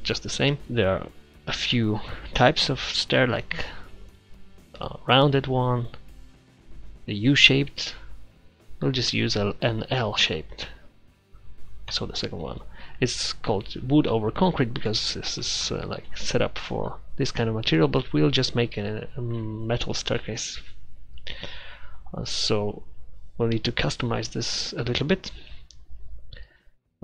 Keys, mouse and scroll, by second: 13.3-14.2 middle drag, 14.2-16.1 middle drag, 16.2-18.9 drag, 24.1 click.